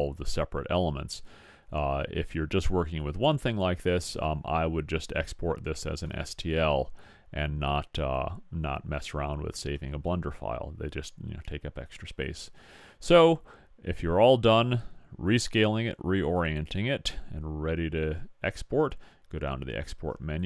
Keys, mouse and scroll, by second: 3.2-8.2 middle drag, 12.2 click.